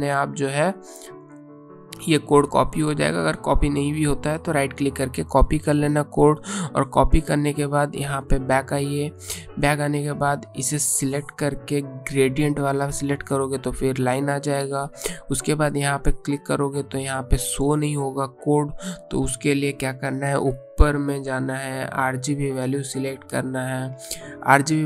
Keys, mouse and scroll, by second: 0.9 click, 7.2 click, 21.5 click, 24.3 click.